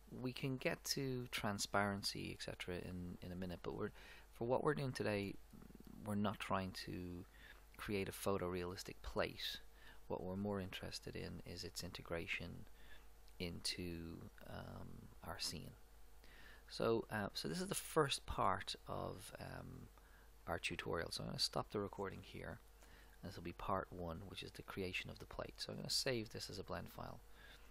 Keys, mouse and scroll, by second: 1.3 click, 5.3-7.1 middle drag, 18.5-20.7 middle drag, 21.0-22.9 middle drag, 23.1-25.0 middle drag, 26.4-27.7 drag.